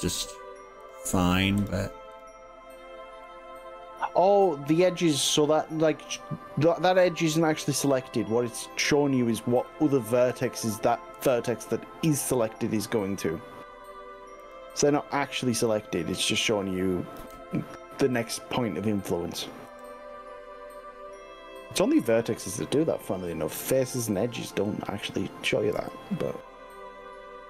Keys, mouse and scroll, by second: 1.0 shift+click, 1.6 shift+click, 2.2 shift+drag, 3.2-5.4 shift+middle drag, 5.6 scroll down 1, 5.9-10.4 middle drag, 11.2 s, 14.6 click, 14.8-16.2 middle drag, 17.2 KP_3, 19.7 g, 24.8 click, 25.8 r.